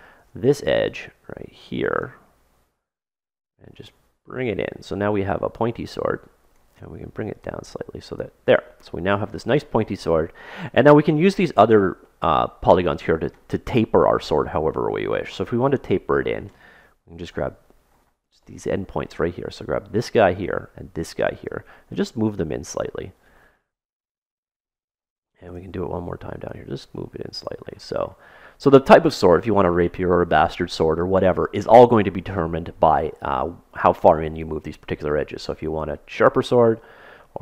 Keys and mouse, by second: 0.2 ctrl+Tab, 1.9-4.9 drag, 7.3-9.2 drag, 11.4-13.8 middle drag, 17.2 right click, 17.9 middle click, 18.5 click, 18.5 middle click, 19.1-21.4 middle drag, 19.9 click, 20.3-22.6 right drag, 21.9-23.7 drag, 23.5-25.4 middle drag, 25.4 click, 27.2-28.3 drag, 28.3-29.8 middle drag, 35.7-37.4 drag.